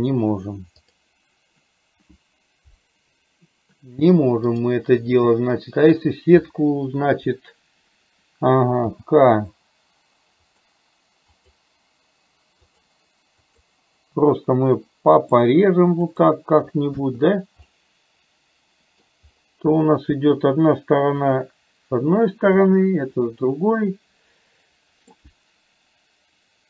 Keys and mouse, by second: 0.9 click, 4.6 click, 17.8-19.2 middle drag, 19.8 middle click, 21.3 click, 22.8-25.2 middle drag.